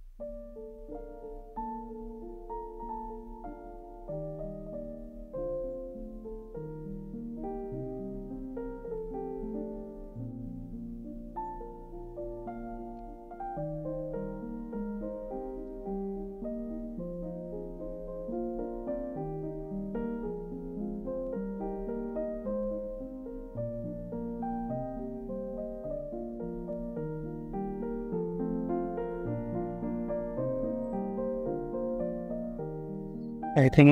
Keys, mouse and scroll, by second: 15.5 typing, 16.2 scroll down 1, 22.1 scroll down 1, 23.1 typing, 32.8 middle click, 33.2 scroll up 1.